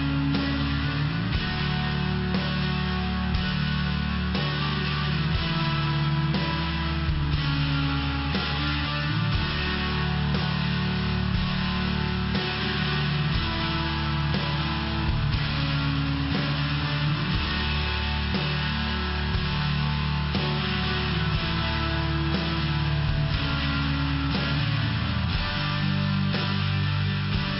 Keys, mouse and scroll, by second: 2.2 click, 5.1 click, 7.7 click, 9.5 click, 12.4 click, 14.1 click, 14.4 click, 14.8 click, 17.1 click, 20.8 click, 25.1 click, 25.8 click, 26.1 click.